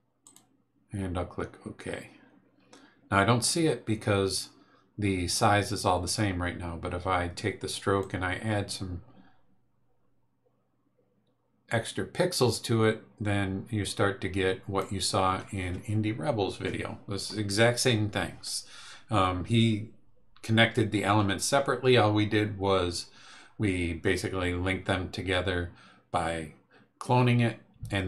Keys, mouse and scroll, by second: 0.2 click, 8.0-15.0 drag.